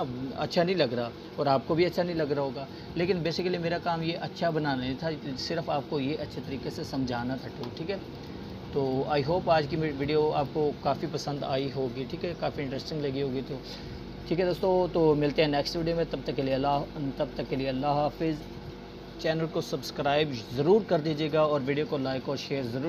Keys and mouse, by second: 2.6-3.6 drag.